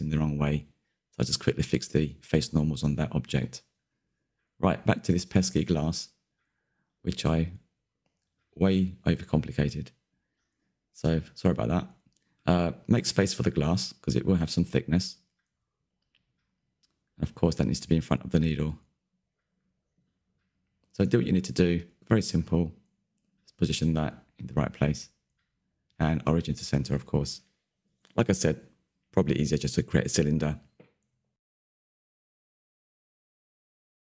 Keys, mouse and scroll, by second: 1.5 alt+n, 2.2 Tab, 2.5 click, 2.8-4.6 middle drag, 4.6 scroll down 3, 4.6-5.3 middle drag, 5.3-6.4 scroll up 3, 6.4 click, 7.2 middle click, 7.7 click, 8.2 middle click, 8.6 click, 9.1 shift+middle click, 9.7 click, 9.9-11.3 middle drag, 11.3 KP_1, 11.7 z, 11.9 scroll up 2, 12.0-12.8 shift+middle drag, 12.8 scroll up 1, 13.1 click, 13.3 click, 13.7-14.6 scroll down 4, 14.6-14.9 right drag, 14.9 scroll down 1, 15.0 Tab, 15.4 2, 15.4 a, 15.6 s, 16.5 z, 16.5 Tab, 16.7 scroll down 1, 16.8 middle click, 17.1-18.0 scroll up 2, 18.0 click, 19.0-19.5 middle drag, 19.5 KP_3, 19.7 middle drag, 20.0-20.6 scroll up 2, 20.6 click, 21.2 drag, 21.8 KP_1, 22.1 z, 22.2-22.6 scroll up 6, 22.6 shift+middle drag, 22.8-23.4 scroll down 3, 23.0 shift+middle click, 23.4-23.7 shift+middle drag, 23.7 click, 23.9 click, 24.0 scroll down 3, 24.2-24.5 scroll up 1, 24.5 click, 25.1-26.0 scroll down 2, 26.0 right click, 26.2-26.6 scroll up 10, 26.6 shift+middle click, 27.2 click, 28.2-28.9 scroll down 3, 28.9-29.3 middle drag, 29.3 z, 29.4-29.8 middle drag, 29.8 click, 31.0 shift+middle click, 31.1-31.6 scroll up 2, 31.6 click, 32.2 KP_1, 32.4 z, 33.5 scroll down 1, 33.8 middle click.